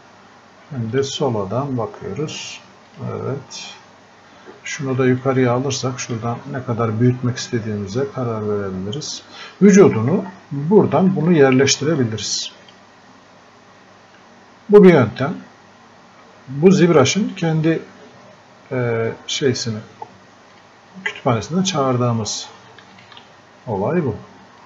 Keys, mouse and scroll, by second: 5.2 alt+click, 10.0-10.3 scroll up 1, 10.7 scroll down 1, 11.3-15.1 alt+drag, 20.6 click, 23.0 alt+click.